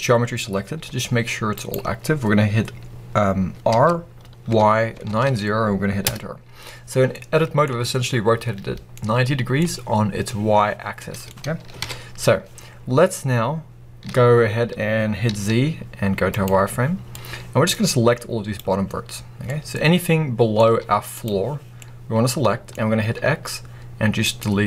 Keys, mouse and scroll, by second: 0.8 g, 1.6 right click, 3.6 r, 7.0 middle click, 8.4 scroll down 1, 8.8 middle click, 11.7 KP_1, 12.7-13.6 scroll up 1, 14.0 z, 17.0 click, 19.0-19.4 scroll up 1, 19.4-20.5 middle drag, 20.5 z, 21.7-23.0 middle drag, 23.0 x.